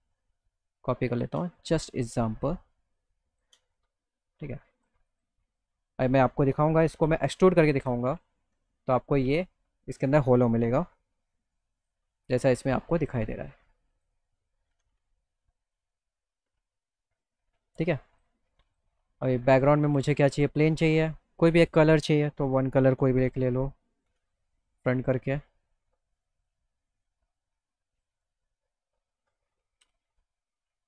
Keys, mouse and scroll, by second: 2.1-3.4 shift+drag, 4.8 click, 5.1 click, 6.1 middle click, 7.3 middle click, 7.8 z, 8.2 middle click, 8.7 middle click, 9.1 middle click, 10.0 click, 10.9 e, 11.8 click, 13.2 click, 15.6 alt+middle click, 17.3 click, 18.7 click, 20.4 click, 21.7 click, 23.0 f, 24.7 middle click, 25.0 middle click, 25.3 middle click, 26.2 click, 27.1 click, 28.2 click, 28.5 middle click, 28.9 middle click, 30.5 z, 30.7 middle click.